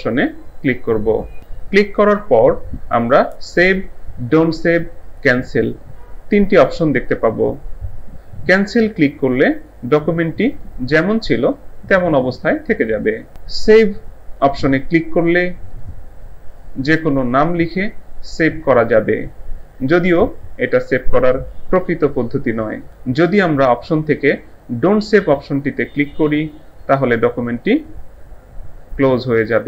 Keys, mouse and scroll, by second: 10.5 click, 15.7 click, 29.0 click.